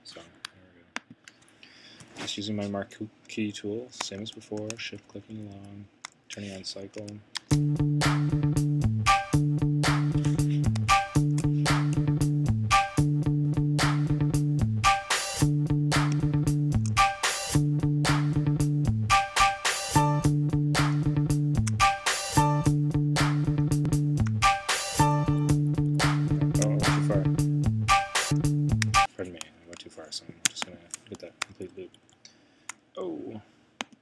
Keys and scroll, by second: 2.0 Right, 4.2 shift+Right, 7.0 c, 10.8 shift+Right, 16.3 shift+Right, 21.1 shift+Right, 24.3 shift+Right, 31.5 shift+Right.